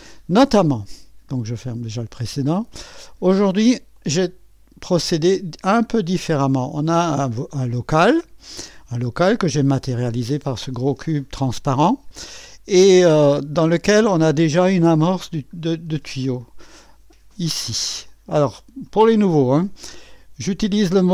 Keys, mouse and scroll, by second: 1.7 click, 3.9-6.8 drag, 9.3 click, 12.4-13.5 drag, 14.4 click, 17.3 middle click, 18.1 click.